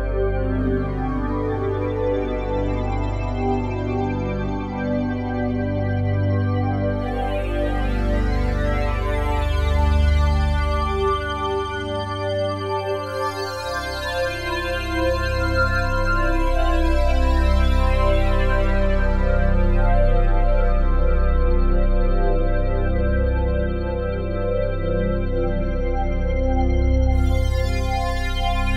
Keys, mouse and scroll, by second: 0.4 Escape, 2.6 g, 5.9 click, 12.3 alt+a, 12.7 b, 13.0 click, 14.0 Delete, 14.4 click, 16.7 ctrl+z, 18.4 t, 19.7 click, 21.3-22.4 drag, 21.7-22.7 typing, 23.5-25.6 drag, 25.6-26.0 typing.